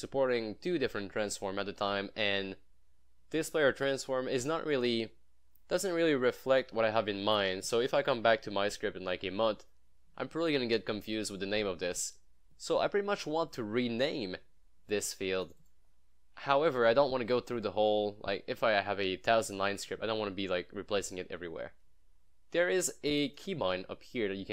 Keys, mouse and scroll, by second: 15.5 click, 16.1 scroll down 1, 16.4 scroll up 1, 17.5 scroll down 1, 18.3 scroll up 1, 22.2 scroll up 1, 23.1 click.